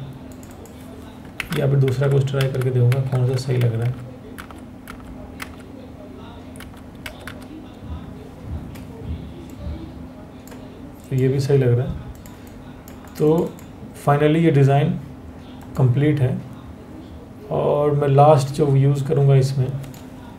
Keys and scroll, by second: 1.0 Up, 1.5 Up, 2.0 Up, 2.9 Up, 6.6 Down, 6.8 Down.